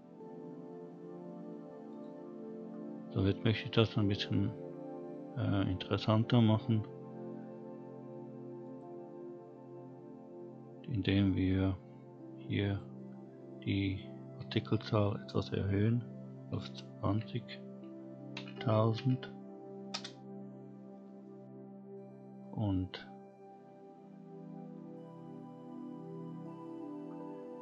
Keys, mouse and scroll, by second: 1.9 click, 2.7-4.2 scroll down 4, 4.2-4.9 scroll up 4, 7.1-8.0 scroll up 2, 8.6 click, 12.7 click, 13.9-19.9 drag, 18.5 0, 26.0-27.0 scroll down 2, 27.0-27.6 scroll up 1.